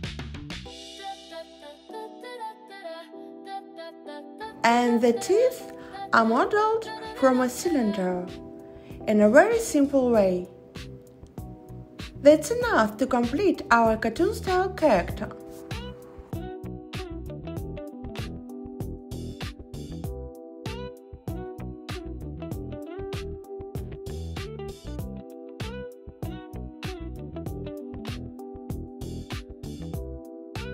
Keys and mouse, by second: 1.9-3.3 drag, 4.8 s, 5.2 z, 6.7 click, 7.1 x, 9.0 click, 9.4 x, 11.7 click, 13.2 click, 13.4-14.3 drag, 15.7 click, 16.4 click, 16.8 click, 17.1-17.7 drag, 18.1 x, 19.5-20.2 drag, 20.6 x, 22.6 click, 24.1 shift+s, 25.7 Tab, 29.9 click.